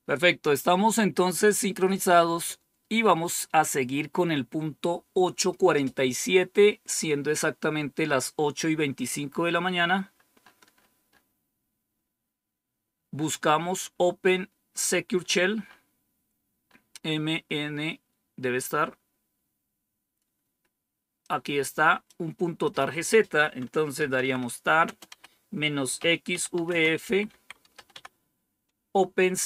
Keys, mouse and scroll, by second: 1.0 click, 9.3-11.1 scroll down 6, 11.5-12.3 scroll down 1, 13.5-14.6 scroll down 1, 15.1-15.8 scroll down 1, 15.8-17.3 scroll up 1, 17.3-18.1 scroll down 2, 21.1 click, 22.5 click, 23.6-28.2 typing.